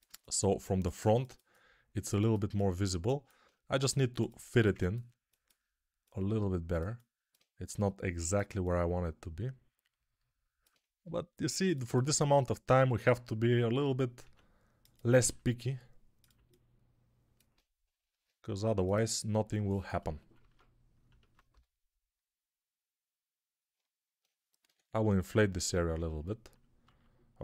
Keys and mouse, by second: 3.6 g, 6.5-8.4 alt+drag, 7.6 g, 8.4-17.4 alt+middle drag, 10.9 g, 14.1 s, 15.1 g, 18.0 ctrl+Tab, 20.4 ctrl+Tab, 21.4 g, 21.7-23.6 middle drag, 23.6-27.4 alt+drag, 24.5 6, 26.8 alt+q.